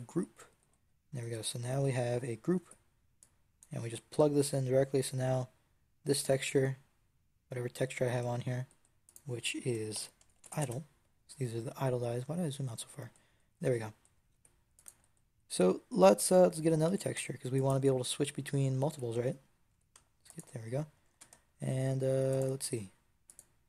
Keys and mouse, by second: 2.5 Tab, 3.5-5.7 drag, 8.9-10.6 middle drag, 10.6 click, 11.6-14.2 middle drag, 14.2-17.5 drag, 14.2 g, 16.7 g, 18.1 click, 18.8 f, 19.6 g, 20.9 shift+d.